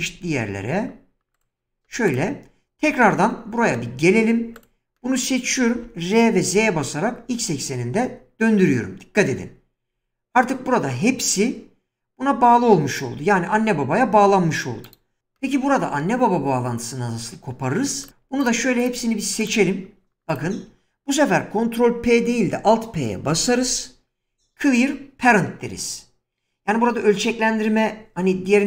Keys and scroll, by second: 5.8 r, 6.5 z, 23.3 alt+p.